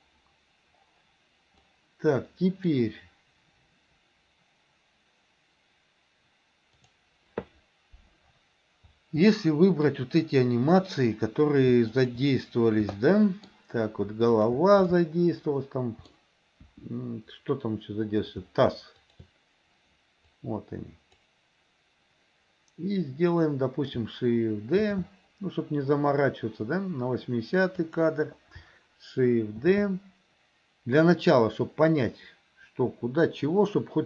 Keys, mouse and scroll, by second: 1.8-2.9 middle drag, 6.8 click, 9.4 middle click, 11.9 shift+click, 13.0-13.6 shift+middle drag, 14.4 shift+click, 14.9-16.2 shift+middle drag, 16.6 KP_1, 19.1 shift+click, 20.3 click, 24.9 shift+d, 29.7 shift+d.